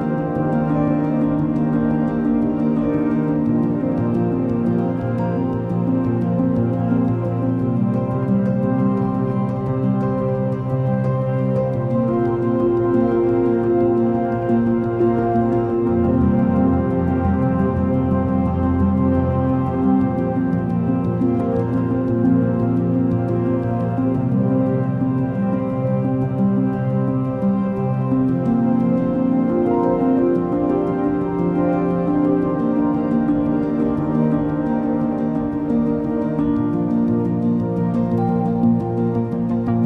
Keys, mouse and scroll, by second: 2.4 alt+click, 11.5 alt+click, 25.4 ctrl+=, 25.8 ctrl+=, 27.1 ctrl+-, 33.4 right click.